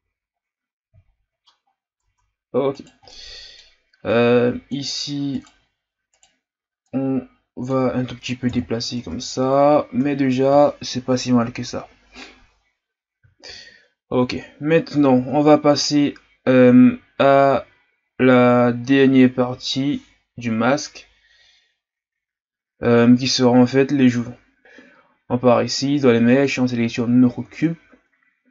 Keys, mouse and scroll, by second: 0.0 a, 0.4-1.1 scroll down 2, 1.1-1.6 shift+scroll up 3, 1.7-2.0 scroll up 2, 2.0 Tab, 2.7 right click, 3.1-4.1 middle drag, 4.1-5.3 drag, 5.3 right click, 6.1 right click, 6.8-8.5 drag, 8.5 KP_1, 9.0 Tab, 9.5-10.0 scroll down 4, 10.1-12.6 scroll down 3, 12.6-13.6 scroll up 1, 13.6-14.4 scroll up 1, 14.4 scroll down 1, 15.1 shift+a, 24.6 shift+a, 27.6 shift+scroll up 1.